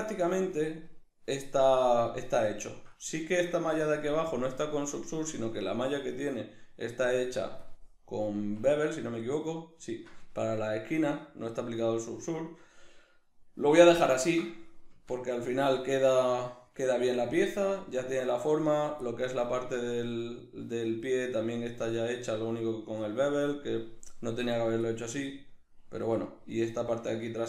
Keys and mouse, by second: 0.5 right click, 0.7-6.0 middle drag, 6.0-7.7 drag, 7.7-10.4 middle drag, 8.3 Tab, 11.0 shift+middle click, 11.2 middle click, 14.2 ctrl+middle click, 14.5 middle click, 15.0 Tab, 15.6 middle click, 18.7 right drag, 19.1-24.5 middle drag, 19.6 Tab, 21.6 Tab, 24.5 right click, 25.0-27.4 middle drag, 26.0 Tab.